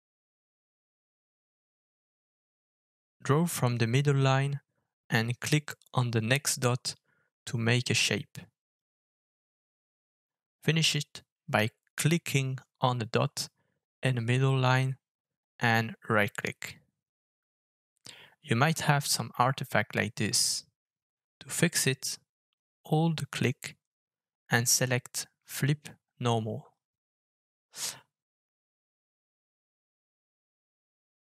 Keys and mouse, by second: 21.6-31.2 middle drag.